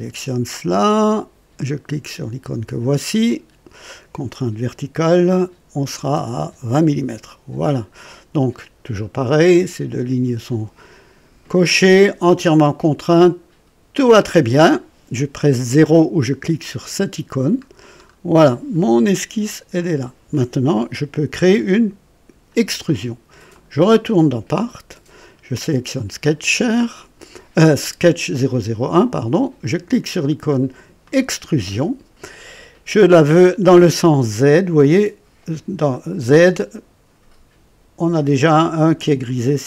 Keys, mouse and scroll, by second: 3.1 click, 5.9 KP_2, 6.1 KP_0, 6.4 Return, 13.9 click, 16.6 click, 17.7-18.2 scroll down 1, 18.4 right click, 19.7 click, 23.5 click, 24.5 click, 25.8 click, 31.0 click.